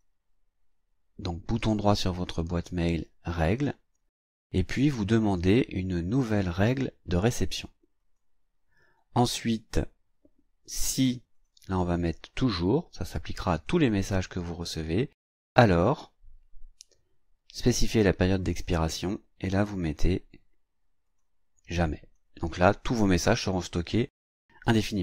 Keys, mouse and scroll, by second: 3.3 click, 8.0 click, 11.3 click, 13.5 click, 15.8 click, 18.5 click, 19.7 click, 21.1 click, 21.8 click.